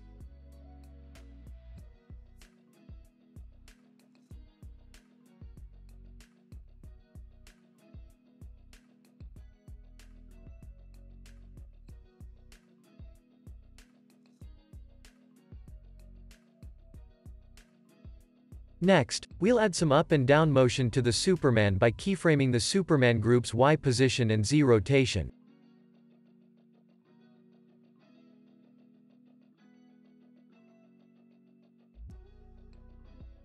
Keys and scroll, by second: 5.4 space, 6.8 space, 8.7 super+s, 8.9 space, 18.3 space, 18.6 super+s, 27.7 super+s.